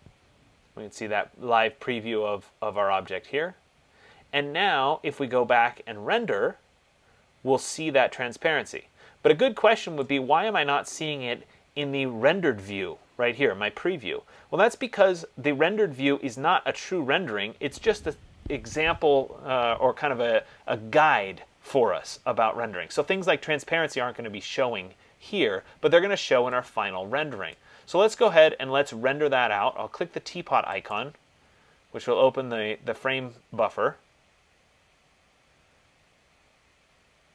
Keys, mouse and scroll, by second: 10.5-15.6 drag, 27.7 click, 31.2 click.